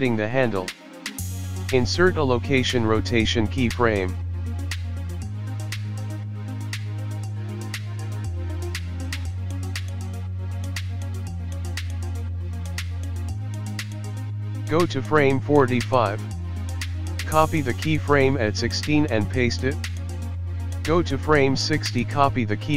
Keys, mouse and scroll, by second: 2.9-4.9 scroll up 4, 4.9 i, 9.1 click, 15.1-15.5 scroll down 3, 16.3 Right, 16.3 Left, 16.8 click, 17.5 ctrl+c, 18.7 ctrl+v, 19.2 ctrl+v, 19.9 click, 20.4 ctrl+c, 21.7 click, 21.9 ctrl+v.